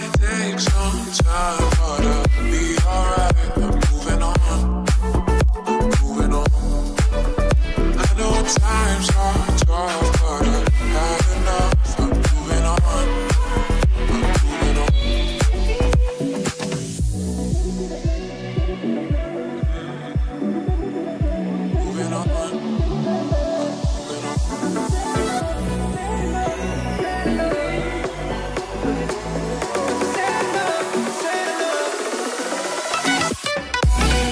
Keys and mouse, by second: 1.6 Right, 1.7 Right, 2.0 Right, 2.0 Left, 3.1 Left, 3.2 Left, 3.3 Left, 3.5 Right, 3.6 Right, 3.7 Right, 3.9 space, 4.5 space, 4.8 Left, 4.9 Left, 5.0 Left, 5.3 Right, 5.4 Right, 10.6 n, 11.5 Left, 11.6 Left, 11.9 Right, 12.0 Right, 17.5 Left, 17.6 Left, 17.8 Left, 18.3 Left, 19.0 Right, 19.8 space, 21.7 space, 22.3 Left, 22.4 Left, 22.5 Left, 22.8 Right, 22.8 Right, 23.2 Left, 25.0 Right, 25.2 Left, 25.4 Left, 25.5 Left, 25.9 Left, 26.2 Left, 26.3 Left, 26.5 Right, 26.7 Right, 26.9 Right, 28.1 Right, 28.7 Right, 29.0 Left, 29.1-29.5 Left, 29.7 Left, 29.9 Left, 30.0 Right, 30.1 Right, 30.3 Right, 30.4 Right, 30.5 Right, 30.6 Right, 31.3 Right, 32.2 click, 32.3-34.3 right drag, 32.7 g.